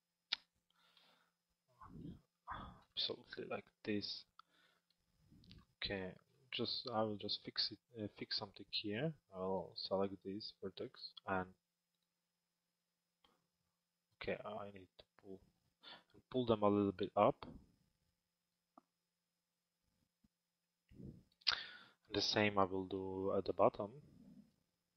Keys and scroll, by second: 0.7 f.